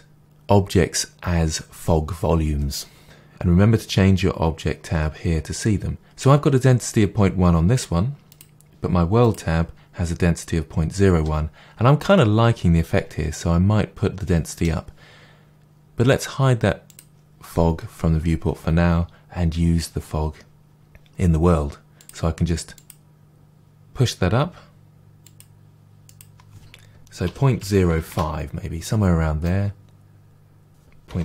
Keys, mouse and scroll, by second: 0.1 click, 3.0-17.0 drag, 20.6-21.3 scroll up 1, 22.7-25.5 drag, 26.0-29.4 drag, 28.1 Return, 29.4-31.2 middle drag, 30.6-31.2 drag.